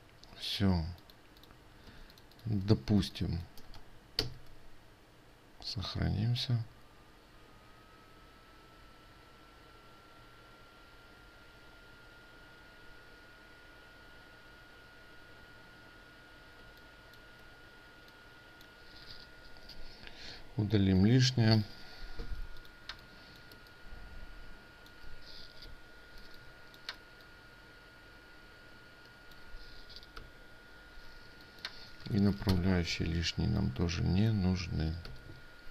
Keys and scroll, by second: 4.8 ctrl+s.